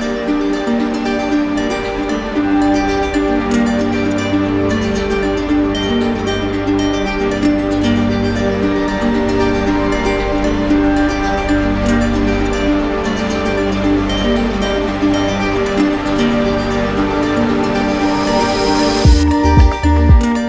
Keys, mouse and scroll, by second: 1.8 click, 4.8 click, 5.3 ctrl+click, 5.5 q, 6.9-7.8 typing, 9.8 click, 11.1 click, 12.7 shift+click, 13.1 shift+click, 13.7 d, 14.0 d, 15.7 d, 16.6 d, 17.5 click, 18.0 shift+click, 19.7 ctrl+click, 20.1 ctrl+click, 20.2 shift+click.